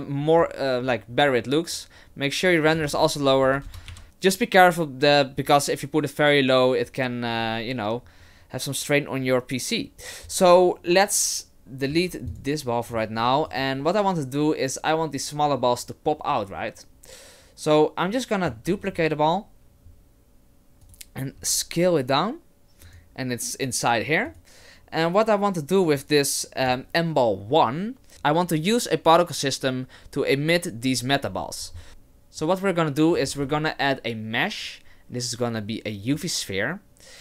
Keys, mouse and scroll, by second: 2.7 click, 11.9 x, 13.5 right click, 18.7 shift+d, 21.4 s, 24.3 right click, 33.3 shift+a.